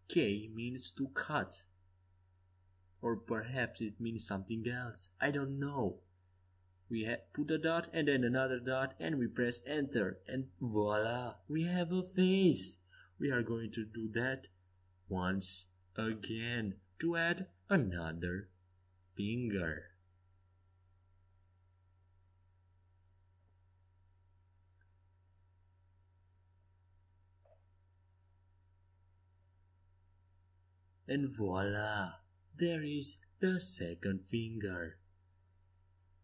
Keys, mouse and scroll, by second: 0.5-4.0 middle drag, 4.0 a, 4.4 a, 5.0-7.6 middle drag, 5.6 k, 12.5 k, 23.1-24.7 middle drag.